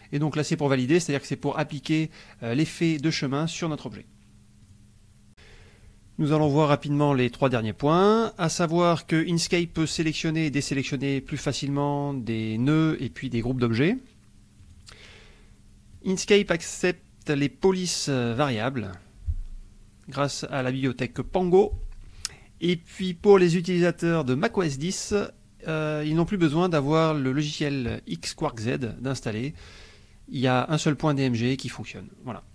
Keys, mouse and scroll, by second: 4.6 click, 14.5 click, 15.9 click.